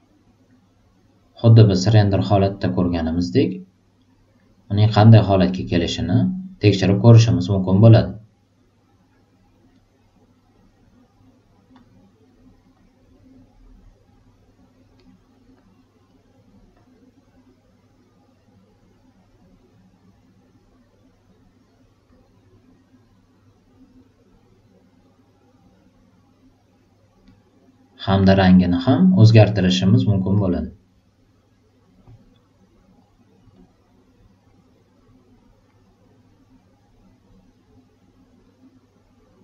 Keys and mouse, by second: 10.5 click, 11.7 click, 12.7-14.9 drag, 15.5 click, 16.7-21.5 drag, 22.0-23.3 drag, 24.2-27.1 drag, 27.9-28.6 drag, 29.2 click, 30.3 click, 33.5-35.5 drag, 36.7-38.2 drag.